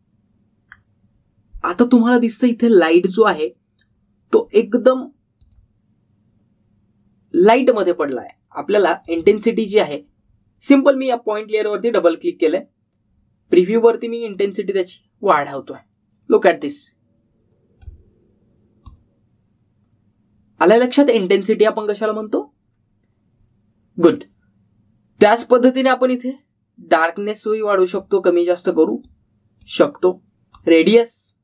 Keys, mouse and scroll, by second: 1.5-2.6 scroll down 1, 4.1 click, 6.5 click, 10.0 click, 15.3-19.0 click, 26.2-29.0 drag.